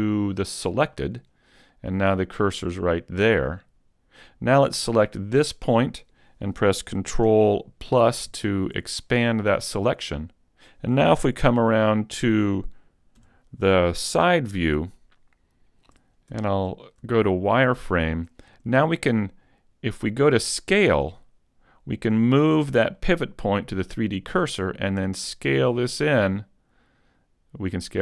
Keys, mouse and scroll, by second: 1.7 middle click, 5.3 right click, 7.9 ctrl+KP_Add, 8.3 ctrl+KP_Add, 12.7 KP_3, 13.2 KP_5, 14.5-15.0 scroll up 3, 15.0 shift+middle click, 16.3 z, 17.1 shift+middle click, 17.1-17.9 scroll up 1, 20.9 click, 23.0 click, 25.9 click.